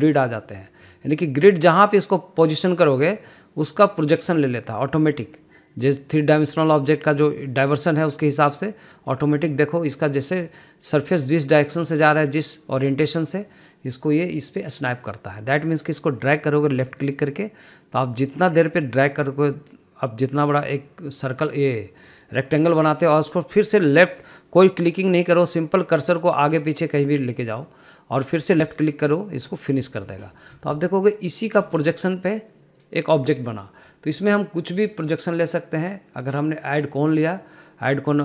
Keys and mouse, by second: 5.6-6.3 middle drag, 7.3-7.8 middle drag, 9.1 middle drag, 10.3 middle click, 11.1-11.9 middle drag, 12.3 middle click, 13.7 middle click, 17.4-30.2 drag, 30.7 middle drag, 31.4-32.1 middle drag, 32.5 middle click, 33.2 middle click, 33.8 middle drag, 35.0-37.7 drag, 38.0-38.2 middle drag.